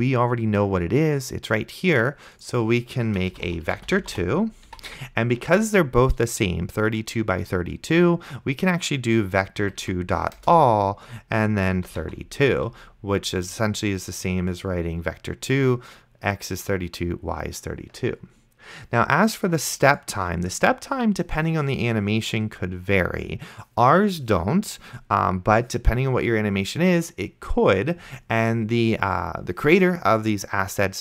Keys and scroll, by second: 3.3-4.7 typing, 9.9 Down, 10.4 Return, 11.7-12.6 typing.